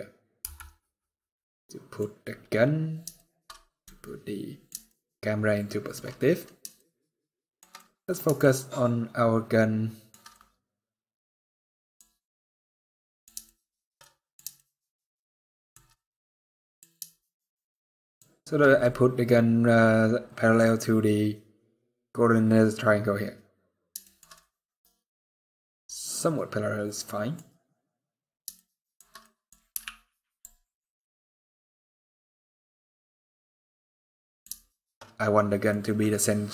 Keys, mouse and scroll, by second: 0.1 n, 0.6 middle click, 2.0-3.6 scroll up 11, 2.9 shift+middle click, 3.6 middle click, 4.6 shift+middle click, 5.8 scroll up 1, 6.5 shift+middle click, 7.5 middle click, 8.1 shift+middle click, 10.0 middle click, 11.9-12.3 scroll up 1, 12.3 middle click, 13.2 shift+middle click, 13.7 middle click, 14.3 shift+middle click, 15.6 middle click, 17.0 shift+middle click, 18.5 middle click, 24.1 middle click, 28.9 middle click, 29.5 z, 31.0 middle click, 34.4 shift+middle click, 34.6 shift+middle click, 34.8-35.4 scroll up 1, 35.4 middle click.